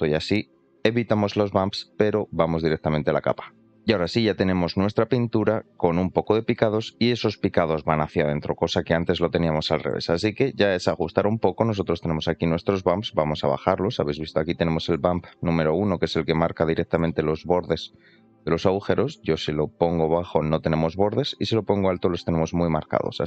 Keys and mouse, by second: 3.6 middle click, 4.3 shift+middle click, 5.5 middle drag, 6.8 middle click, 10.1 shift+middle click, 10.9 shift+middle click, 12.2-15.0 drag, 15.3 middle click, 16.2 shift+middle click, 17.2-17.9 shift+middle drag, 18.7-23.2 drag.